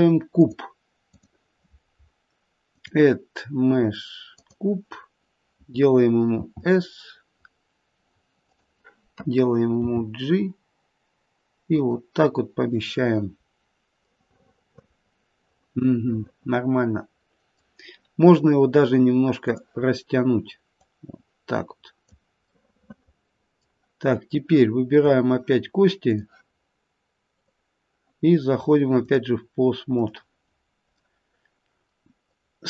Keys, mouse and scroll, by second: 0.4 click, 4.5 click, 6.4 s, 9.8 g, 14.3 middle click, 14.5 middle click, 19.4 click, 20.7 click, 22.4 middle click, 25.1 scroll up 3, 26.0 click, 27.3 click, 32.2 click.